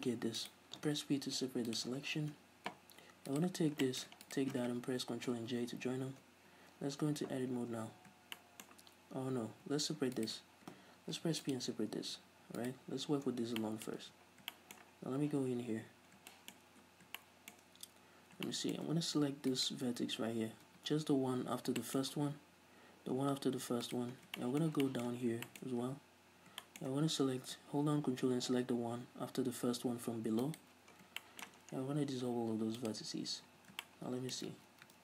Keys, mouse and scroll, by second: 0.7 right click, 1.5 p, 2.4 Tab, 3.4 right click, 3.9-4.3 shift+middle drag, 4.4 shift+right click, 5.6 ctrl+j, 6.5 Tab, 6.9 middle click, 6.9-7.6 scroll up 2, 7.6 a, 8.5-10.4 shift+middle drag, 9.5 Tab, 10.4 alt+right click, 11.3 p, 12.3 Tab, 12.8 right click, 13.2 Tab, 13.8-19.7 shift+middle drag, 14.1 a, 14.3 click, 14.3 right click, 14.5 scroll down 1, 15.1 scroll down 2, 15.4 z, 15.7-16.8 scroll up 3, 18.1-18.5 scroll up 2, 19.7 right click, 20.8 a, 21.9 shift+middle click, 22.4-22.7 scroll up 2, 22.7 scroll down 2, 24.0 right click, 24.3 scroll down 1, 24.5-30.6 shift+middle drag, 25.3 scroll down 1, 25.7-26.7 scroll up 2, 30.6 ctrl+right click, 31.1 scroll down 1, 31.3 shift+middle click, 31.7-32.0 scroll down 2, 32.0 x, 33.6 a, 34.0-35.0 shift+middle drag, 34.6 ctrl+z.